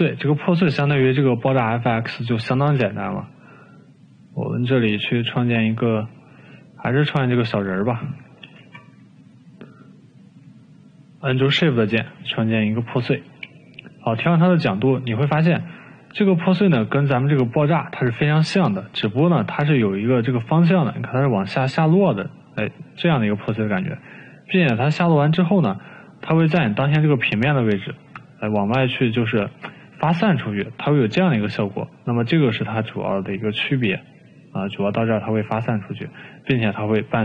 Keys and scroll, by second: 3.6 Delete, 10.5 o.